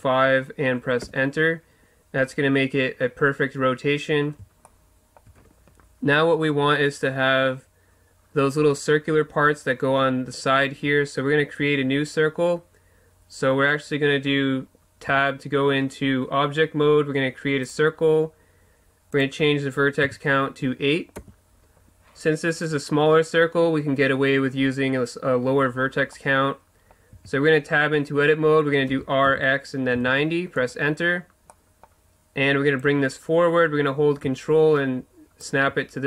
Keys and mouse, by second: 4.6 click, 4.8-7.7 middle drag, 15.1 Tab, 17.6-26.1 drag, 26.1-27.1 middle drag, 27.1 Tab, 28.9 r, 32.8-34.7 drag.